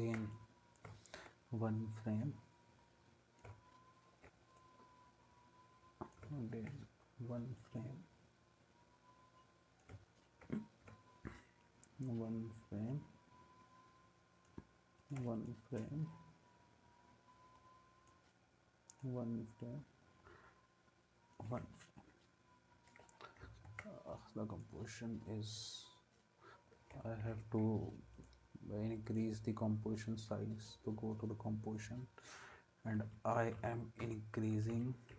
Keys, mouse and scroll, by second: 23.7 ctrl+s, 27.3 Escape, 33.0 Left, 33.1 Left, 33.6 Right, 34.0 Right.